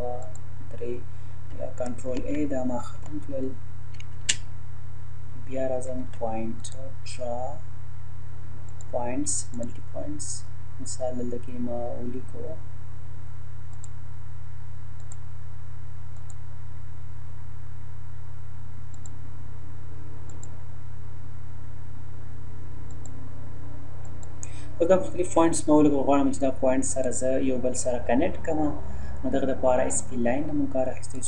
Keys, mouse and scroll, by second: 2.2 ctrl+a, 2.9 Delete, 4.1 space, 5.8 Escape, 6.6 click, 8.7 click, 13.7 click, 18.9 click, 22.9 click, 25.1 Escape, 27.1 click, 29.9 click.